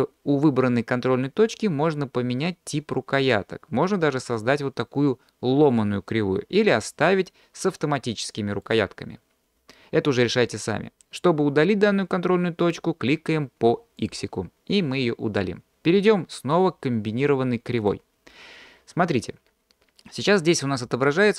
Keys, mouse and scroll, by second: 3.2 drag, 4.2 click, 8.6-9.8 drag, 14.0 drag, 17.8 click.